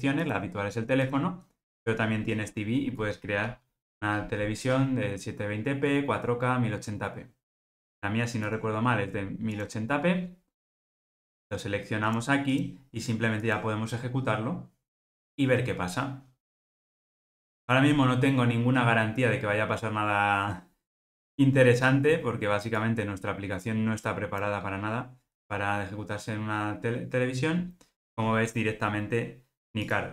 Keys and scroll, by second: 13.6 ctrl+r.